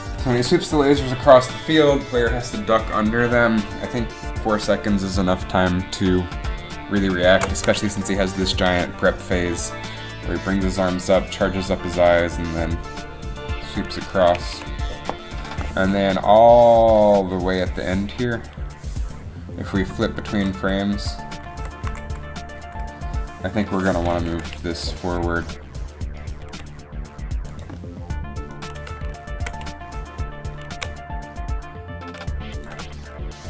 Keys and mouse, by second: 8.4 shift+Left, 8.8 alt+a, 14.5 alt+a, 17.3 Up, 18.6-20.0 drag, 20.0 Down, 20.5 Up, 20.6 Down, 21.1 Up, 21.6 Down, 22.0 Up, 22.1 Down, 22.7 Up, 24.3 ctrl+KP_3, 25.4 g, 26.5 g, 29.1 ctrl+KP_3, 30.8 g.